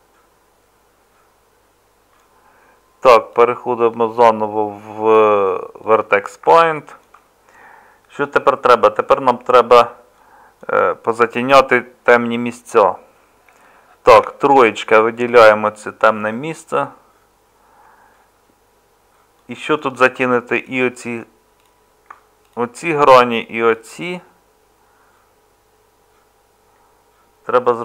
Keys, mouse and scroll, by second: 12.1 Tab, 14.1 Tab.